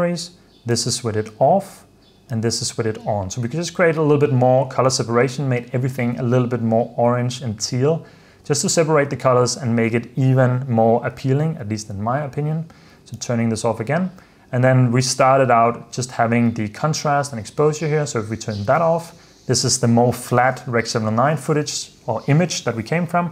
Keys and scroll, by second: 1.0 super+d, 2.5 super+d, 11.3 super+f, 12.0 super+s, 13.4 super+d, 17.7 super+f, 18.7 super+d.